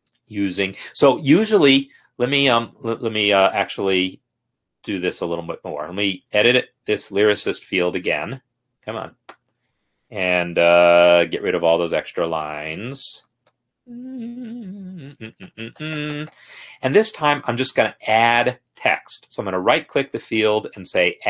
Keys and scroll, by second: 7.6 Escape, 8.3 Escape, 8.6 Escape, 11.6 Down, 13.8 BackSpace, 14.2 BackSpace, 14.3-17.0 BackSpace, 17.0 Escape.